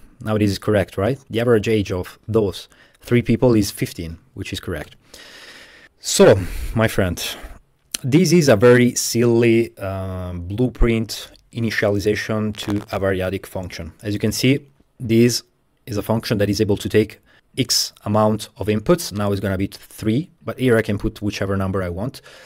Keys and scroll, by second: 4.7 typing, 4.8 Tab, 4.9 Return.